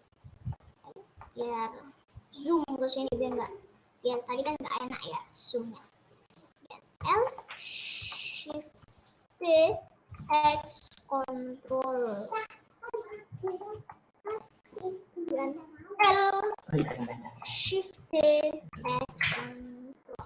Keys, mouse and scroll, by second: 1.9-2.9 scroll up 4, 2.9-3.4 scroll down 2, 3.4-4.4 middle drag, 4.4 scroll up 3, 5.2 click, 5.5-5.9 scroll down 2, 5.9 middle click, 6.5 scroll down 1, 7.4 middle click, 8.1-9.7 middle drag, 9.7 shift+d, 13.6-15.5 middle drag, 15.5 click, 15.9 l, 16.7 middle click, 16.9 scroll down 2, 17.1 shift+middle click, 17.9 shift+d.